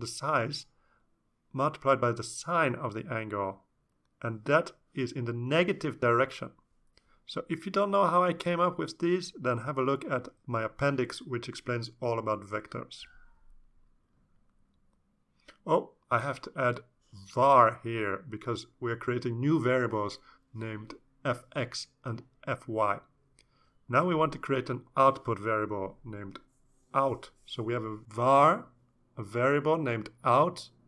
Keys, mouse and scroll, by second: 0.0-4.5 typing, 5.7 Return, 16.7-20.9 typing, 17.8 Up, 17.9 Up, 18.3 Left, 18.4 Left, 19.4 Left, 25.5 Down, 25.7 Down, 26.4-29.6 typing, 30.3 ctrl+space.